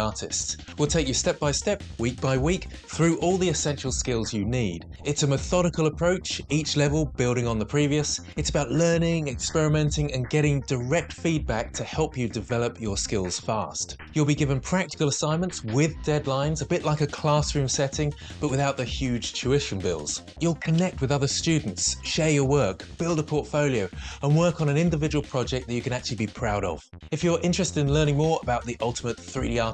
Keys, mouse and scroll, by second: 18.8 n, 19.2 Delete, 19.4 Delete, 19.6 Tab.